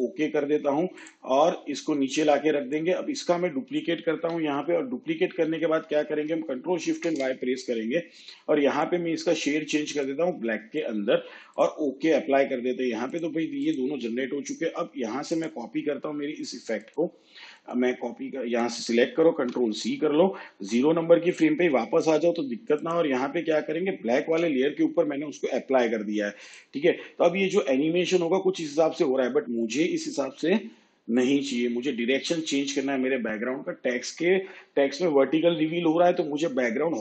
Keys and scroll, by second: 4.2 ctrl+d, 6.9 ctrl+shift+y, 19.3 ctrl+c, 24.3 ctrl+v.